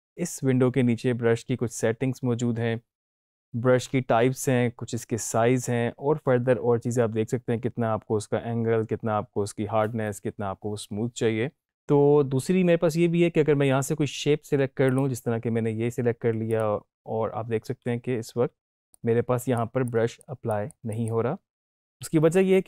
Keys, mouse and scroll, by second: 14.8 click, 14.8 click, 18.9-20.5 drag, 21.8 ctrl+z.